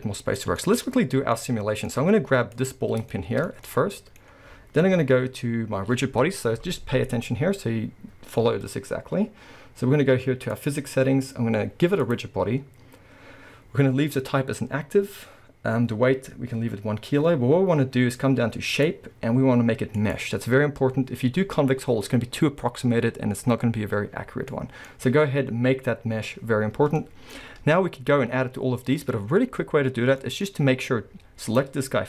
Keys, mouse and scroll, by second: 0.8-1.4 scroll, 1.9-2.6 scroll, 2.6 click, 3.1-10.5 shift+middle drag, 10.5 click, 12.0 click, 18.8-24.5 drag, 24.5-30.6 middle drag, 24.9-26.7 scroll up 2, 26.7-27.0 scroll down 2, 27.9-29.9 scroll up 2, 29.9-30.2 scroll down 2, 30.4 scroll up 2, 31.5 click.